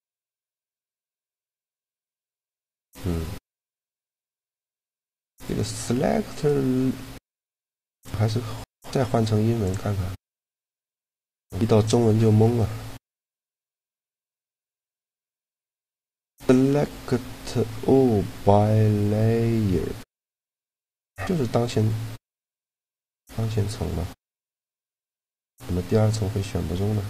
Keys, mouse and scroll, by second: 4.7 a, 5.1-6.2 right drag, 6.2 click, 6.7-8.7 drag, 9.4 click, 14.3-16.0 drag, 22.2-24.7 middle drag.